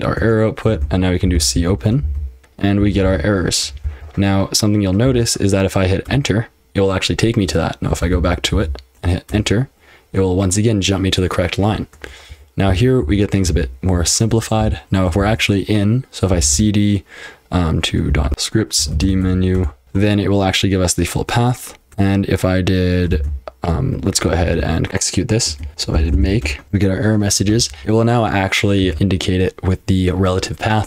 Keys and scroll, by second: 0.2 Return, 0.7-9.0 typing, 9.3 Return, 12.0-16.8 typing, 18.0-20.2 typing, 21.9 ctrl+w, 21.9 j, 23.1 shift+;, 24.4 ctrl+[, 24.6-29.4 typing, 27.5 ctrl+w, 30.6-30.8 typing.